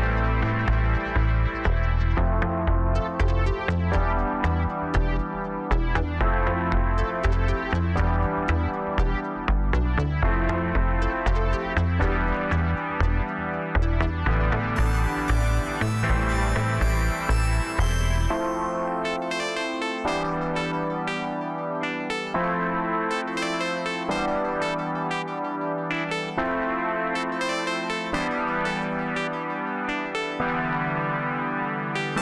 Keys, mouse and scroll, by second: 2.7-3.6 scroll down 8, 3.6-4.0 scroll down 2, 4.0-6.3 middle drag, 6.3-6.9 scroll up 5, 7.0 scroll down 2, 7.2-8.0 middle drag, 8.0 scroll down 3, 8.2 middle click, 9.1-9.9 scroll up 3, 9.9-10.8 middle drag, 10.8 scroll down 2, 11.0-12.3 middle drag, 12.3-13.3 scroll up 4, 13.3 click, 13.8-14.1 scroll down 1, 14.1 middle click, 14.6-14.9 scroll down 4, 14.9-15.3 middle drag, 15.3-16.2 scroll up 1, 16.2 Tab, 16.7-17.7 scroll up 2, 17.7 scroll up 1, 17.8-19.3 drag, 19.3 middle click, 19.8-20.4 scroll up 5, 20.4 Tab, 21.4 click, 21.9-23.9 middle drag, 23.9-27.1 drag, 27.1 scroll down 1, 27.4-30.4 middle drag, 31.3-32.2 drag.